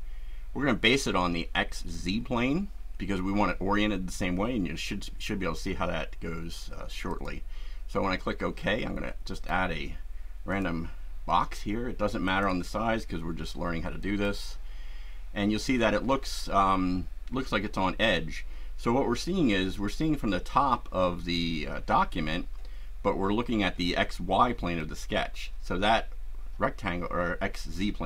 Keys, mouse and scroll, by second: 1.7 click, 7.1 click, 9.4 click, 10.5-11.7 drag, 12.2 click, 14.0 click, 24.8-28.0 shift+right drag.